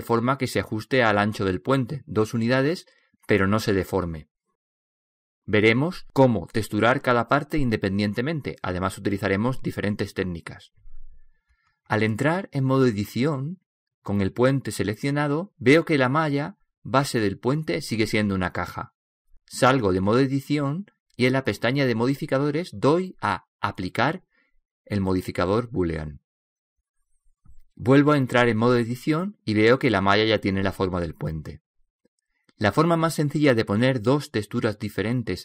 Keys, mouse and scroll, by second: 0.0-2.2 middle drag, 13.3 Tab, 20.8 Tab, 24.4-26.3 drag, 28.7 Tab.